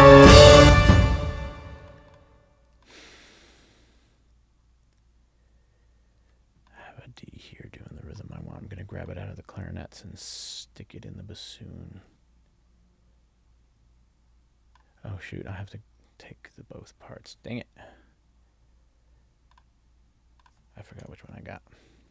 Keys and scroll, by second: 0.7 space.